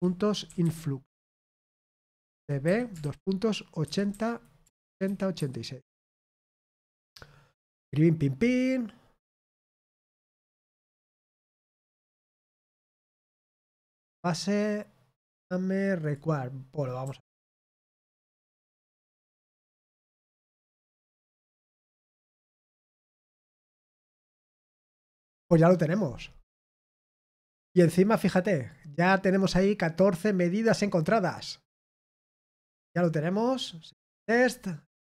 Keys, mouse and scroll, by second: 0.8-3.4 typing, 10.2 click, 15.9 click, 24.0 click, 28.6 click, 32.8 click.